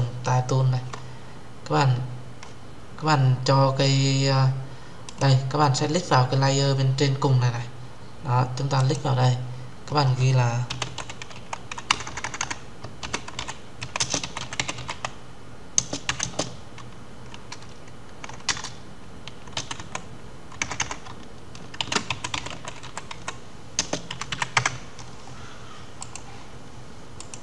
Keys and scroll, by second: 18.2 Return.